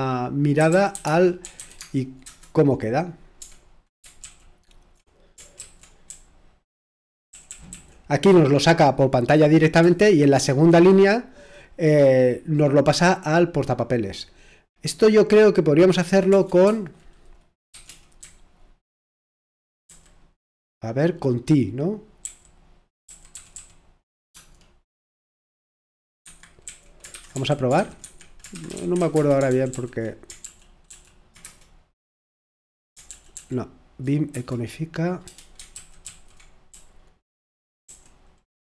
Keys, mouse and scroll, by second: 0.3-2.3 typing, 4.2 Return, 4.2 Tab, 6.5-7.7 typing, 17.7-19.2 typing, 22.0-24.3 typing, 26.2 Escape, 26.4-30.0 typing, 30.4 ctrl+p, 34.3 Return, 35.7 ctrl+p, 35.8-37.4 typing, 36.7 Return.